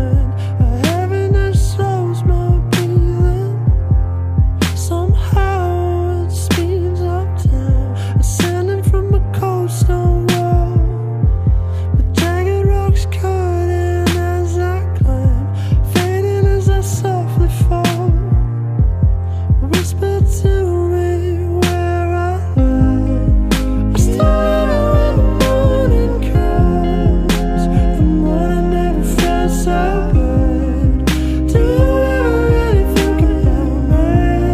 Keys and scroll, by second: 0.4 ctrl+z, 5.4 ctrl+z, 6.4 ctrl+z, 7.1 ctrl+z, 7.7 ctrl+z, 9.1 ctrl+z, 10.3 ctrl+z, 11.6 ctrl+z, 14.5 ctrl+z, 14.8 ctrl+z, 15.4 ctrl+z, 17.1 ctrl+z, 20.2 ctrl+z, 22.6 ctrl+z, 22.8 ctrl+z, 23.3 ctrl+z, 25.8 ctrl+z, 27.2 ctrl+z, 27.5 ctrl+z, 29.4 ctrl+z, 30.3 ctrl+z, 31.4 ctrl+z, 33.5 ctrl+z, 34.0 ctrl+z.